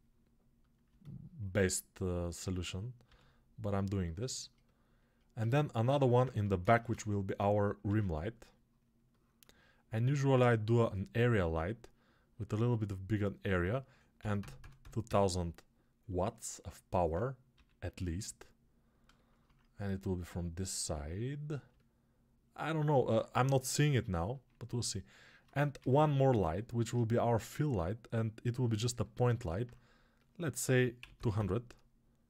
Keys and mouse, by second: 3.8-16.0 alt+middle drag, 16.0-17.9 alt+drag, 17.9-21.6 alt+middle drag, 21.6-25.3 alt+right drag, 25.3 alt+click, 25.3 right click, 25.5 shift+click, 26.3-32.2 alt+middle drag.